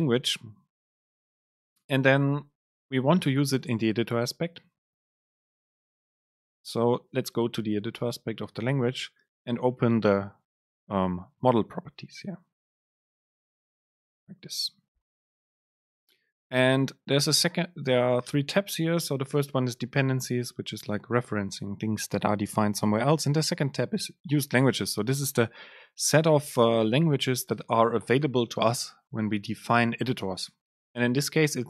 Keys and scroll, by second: 14.2 alt+Return.